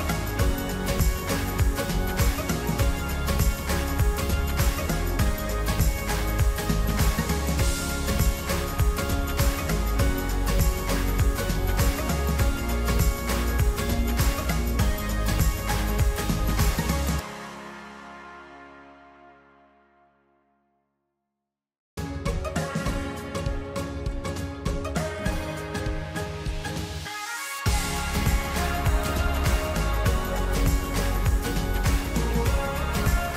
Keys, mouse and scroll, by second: 9.4-13.4 middle drag, 13.4 e, 16.0-18.1 drag, 20.3-23.8 middle drag, 23.8-25.9 drag, 26.9-33.0 middle drag.